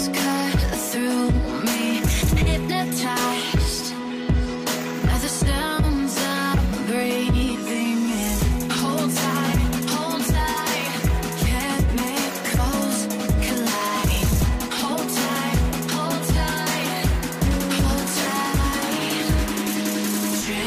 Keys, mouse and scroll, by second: 1.8 ctrl+t, 3.0 shift+click, 3.9 Return, 6.5 v, 16.1 v, 18.5 e, 19.0 alt+right click, 20.4 space.